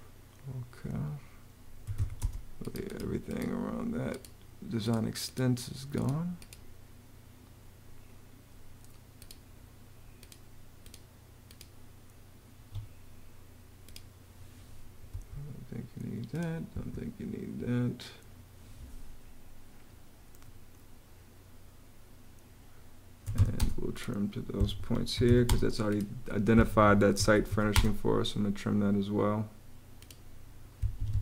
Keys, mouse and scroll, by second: 1.4-2.3 typing, 12.3 Escape, 14.9 BackSpace, 16.5 BackSpace, 22.8-23.7 typing, 24.4 Escape, 24.7-27.5 typing, 30.8 Escape, 31.0-31.2 typing.